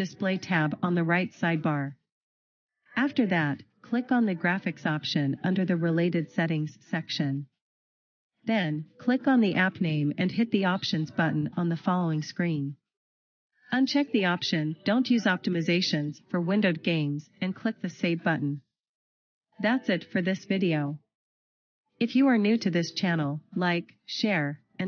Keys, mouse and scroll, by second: 0.6 click, 4.6-5.3 scroll down 1, 7.1 click, 12.4 click, 13.5-15.8 scroll down 1, 15.8 click.